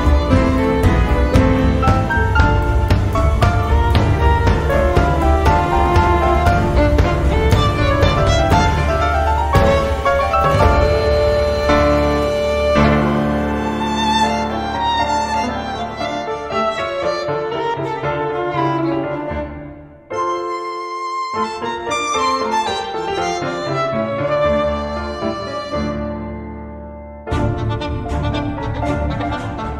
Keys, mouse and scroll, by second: 0.3 click, 1.8-2.3 scroll down 1, 2.4 scroll down 1, 2.9 click, 4.2 click, 5.5 4, 6.0 0, 7.0 click, 7.4 click, 8.4 click, 9.1 click, 11.1 click, 11.6 space, 13.3 click, 14.6 click, 14.6 space, 15.1 click, 15.4 space, 16.1 click, 16.4 space, 16.9-19.0 drag, 20.2 click, 21.5 click, 23.3 click, 24.3 click, 25.1 click, 26.0 4, 26.5 0, 27.1 Return, 27.2 click, 28.2 4, 28.6 0, 29.2 Return, 29.2 click.